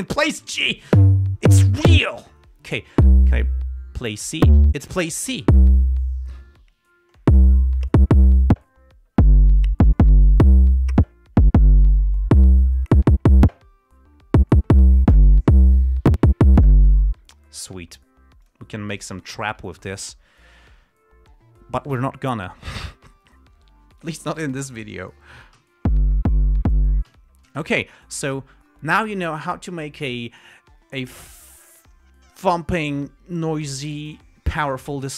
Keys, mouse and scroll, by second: 2.2 Page_Down, 18.8 click, 19.7 g, 20.1 ctrl+scroll down 2, 20.8 ctrl+scroll up 2, 21.1 ctrl+d, 22.2 g, 24.3 click, 25.2 ], 26.0 l, 27.4 l, 27.8 space, 28.2 scroll down 1, 28.5-29.9 scroll up 1.